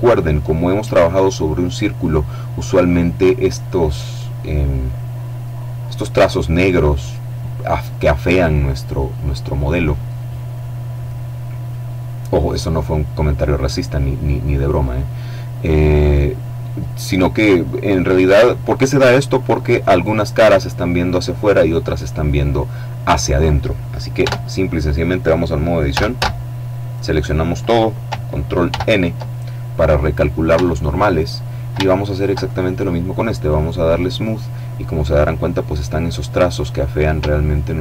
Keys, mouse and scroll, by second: 1.2-1.7 scroll up 1, 1.7-2.2 scroll down 1, 4.7 click, 4.9-9.7 middle drag, 13.9-16.4 middle drag, 23.4 Tab, 25.1 a, 27.8 ctrl+n, 29.7 Tab, 30.4-31.0 scroll down 3, 31.6 shift+right click, 33.1 click, 34.0-35.2 scroll up 1, 36.6-37.6 shift+middle drag.